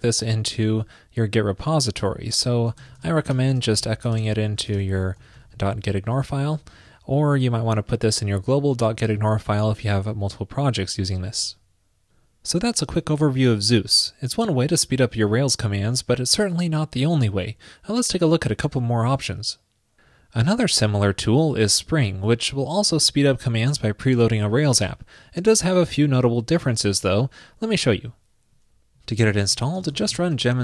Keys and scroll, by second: 3.9 super+v.